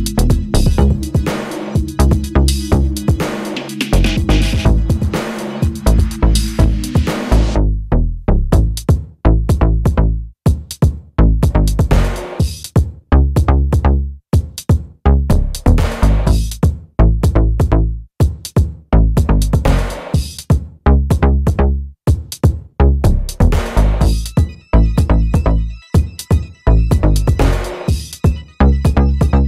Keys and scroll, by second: 10.2 super+c, 10.3 super+v, 26.9 super+d, 28.7 super+d.